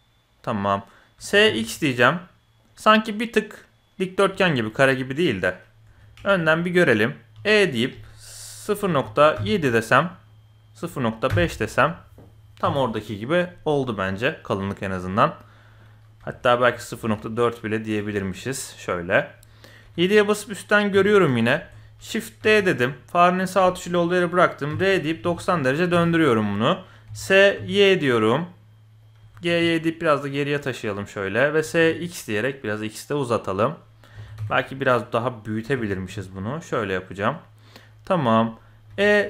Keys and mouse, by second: 1.1 s, 4.4 shift+middle click, 5.8 KP_1, 6.3 shift+middle click, 7.3 e, 13.8-14.8 middle drag, 15.2-16.0 middle drag, 16.2 KP_1, 16.6 g, 18.1-19.1 middle drag, 19.1 click, 19.8 KP_8, 20.9 KP_7, 21.5 shift+click, 22.4 shift+d, 24.7 r, 27.0 s, 29.2 g, 31.6 s, 34.1 s, 35.6 g, 37.6 middle click, 38.6 middle click, 38.9 e.